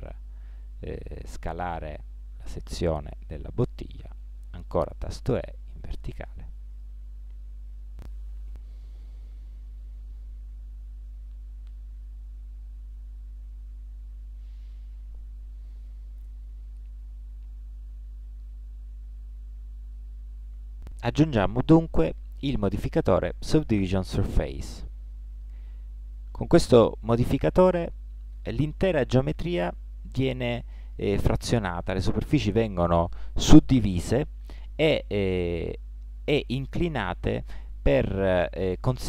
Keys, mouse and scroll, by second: 4.8 e, 8.6 middle click, 10.1-12.4 middle drag, 32.3 middle click, 33.7-39.0 middle drag.